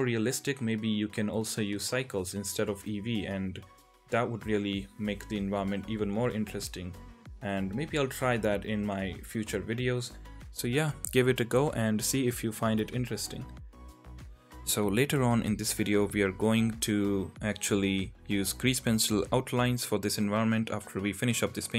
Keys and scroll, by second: 0.3 ctrl+z, 1.8 ], 1.9 ], 2.4 ctrl+z, 3.8 ctrl+z, 4.0-7.9 typing, 6.2 ctrl+z, 8.6 Tab, 9.3 Tab, 9.7 ctrl+z, 10.5 ctrl+z, 10.7 ctrl+z, 11.2 Tab, 12.9 Tab, 14.6 ctrl+z, 14.6-16.3 typing, 15.7 ctrl+z, 16.3 ctrl+z, 18.3-20.2 typing, 20.0 ctrl+z.